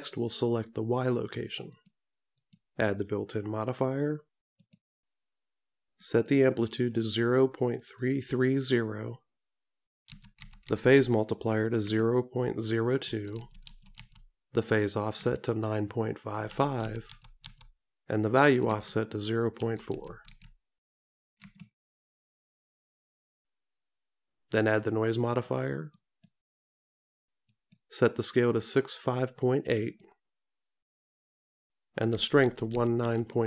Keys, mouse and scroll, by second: 2.5 click, 4.8 click, 7.9 click, 10.8 KP_3, 26.0 click, 30.0 click.